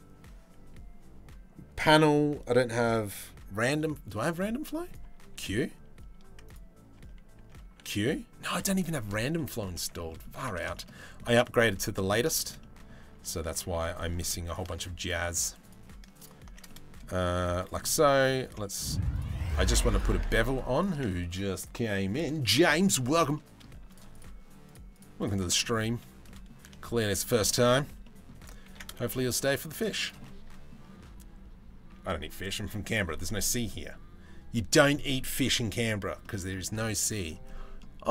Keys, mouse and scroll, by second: 4.9 q, 6.5 Tab, 7.0 Tab, 7.2 q, 8.4 shift+middle click, 8.9 middle click, 9.3 Tab, 9.7 middle click, 10.0 a, 10.5 middle click, 11.2 middle click, 11.9 shift+middle click, 12.2 middle click, 12.8 Tab, 12.9 Tab, 13.2 2, 16.3 middle click, 16.9 z, 17.4 middle click, 18.3 click, 19.5 click, 20.3 alt+shift+click, 22.9 middle click, 25.2 middle click, 25.8 middle click, 26.4 shift+middle click, 26.6 z, 27.1 middle click, 27.6 middle click, 28.2 ctrl+b, 29.8 middle click, 34.1 middle click, 35.8 middle click, 37.0-38.1 middle drag.